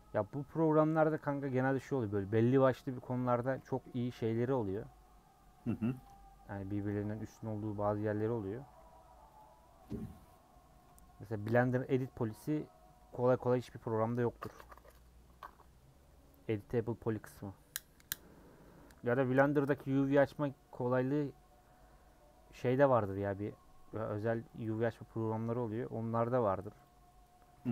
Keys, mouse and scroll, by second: 0.0 u, 0.6-4.7 middle drag, 4.7 alt+click, 6.9 ctrl+click, 7.4 scroll up 1, 7.4-8.6 middle drag, 8.6 a, 9.6 u, 10.1-11.1 middle drag, 11.1 scroll down 3, 11.3-22.2 middle drag, 22.2 scroll down 1, 22.5 middle click, 22.7-23.8 scroll up 1, 23.8-24.1 scroll up 1, 25.1 scroll down 1, 25.2-26.8 middle drag, 27.5 a.